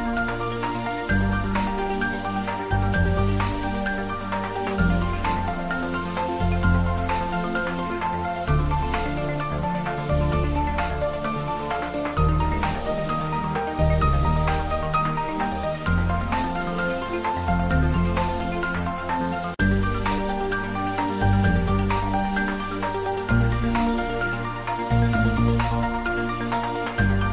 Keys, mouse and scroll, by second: 0.5 click, 0.6 ctrl+z, 1.1 shift+middle click, 2.4 shift+d, 2.7 y, 7.0 click, 7.2 ctrl+s, 8.8 click, 9.1 ctrl+s, 9.5-10.8 ctrl+middle drag, 10.8 ctrl+z, 12.7 Left, 15.3 click, 15.8 ctrl+s, 16.7 click, 17.6 ctrl+s, 19.1 ctrl+s, 19.6 shift+middle click, 20.2 ctrl+middle click, 20.4 shift+middle click, 20.8 ctrl+s, 22.0 click, 22.4 ctrl+s.